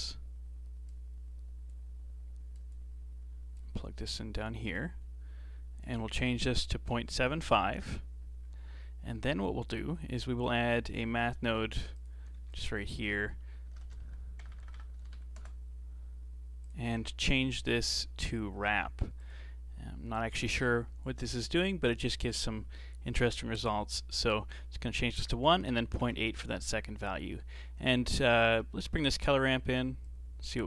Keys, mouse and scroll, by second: 0.9 click, 2.6 click, 3.6 click, 5.8-8.5 drag, 8.5-9.2 scroll down 6, 9.2-10.4 middle drag, 10.4 click, 11.5 g, 12.4 shift+a, 14.5 BackSpace, 14.6 BackSpace, 14.7 BackSpace, 17.0-17.7 scroll up 6, 17.7 click, 18.0-20.1 drag, 20.1-23.2 scroll up 4, 24.1-26.9 drag, 26.9 scroll down 3, 27.1 middle click, 28.0 scroll down 2, 28.3 middle click, 28.7 scroll up 1, 28.7-30.0 middle drag, 30.0-30.6 drag.